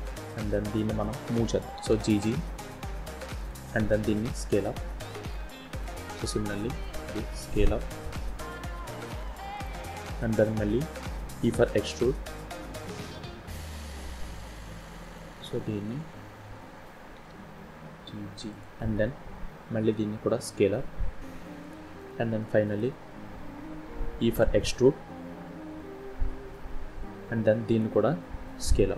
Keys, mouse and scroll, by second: 0.2 click, 1.7 g, 3.8 s, 6.2 click, 7.0 s, 9.9 shift+middle click, 10.3-11.1 shift+scroll down 3, 11.5 e, 17.1 g, 19.4 s, 21.9 shift+middle click, 23.2-24.2 scroll down 1, 24.2 e, 28.7 s.